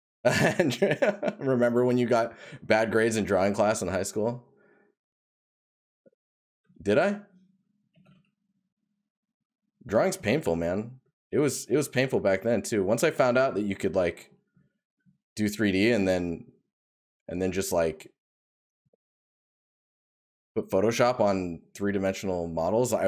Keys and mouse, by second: 4.5 right click, 13.4 right click.